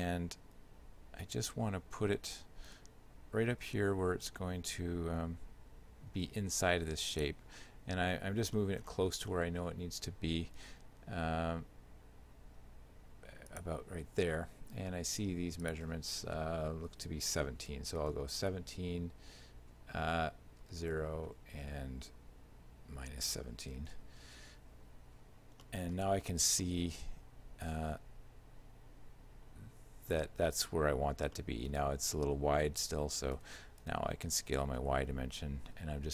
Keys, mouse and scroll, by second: 1.2 z, 2.8 g, 8.4 scroll up 1, 8.6 middle click, 9.1 scroll up 1, 9.4 middle click, 10.7 g, 15.7 click, 25.7 shift+middle click, 26.2 z, 26.7 shift+middle click, 31.4 shift+middle click, 33.4 s.